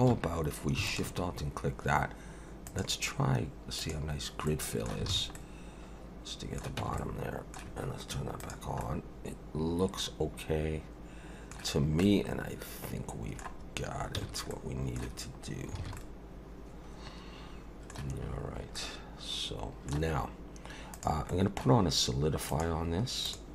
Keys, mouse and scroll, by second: 0.1 2, 0.9 alt+shift+click, 2.7 click, 4.5 middle click, 5.1 alt+a, 5.3 middle click, 6.8 Tab, 7.0 middle click, 8.5 click, 8.8 middle click, 11.8 scroll down 2, 12.0 middle click, 14.2 ctrl+s, 14.5 middle click, 15.4-15.7 scroll down 2, 15.8 alt+a, 16.0 middle click, 18.7 middle click, 20.9 click, 21.3 middle click, 22.5 click, 23.2 click.